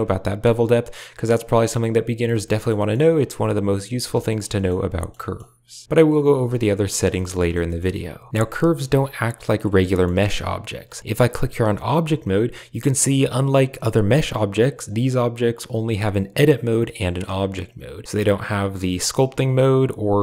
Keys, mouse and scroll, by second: 2.3 middle drag, 2.7 shift+middle click, 3.4 shift+click, 4.2 middle drag, 4.4 shift+middle click, 4.9 shift+middle click, 5.1 middle click, 7.0 shift+middle click, 7.3 middle click, 7.5 shift+middle drag, 8.5 shift+middle click, 9.7 shift+middle click, 11.7-20.2 drag.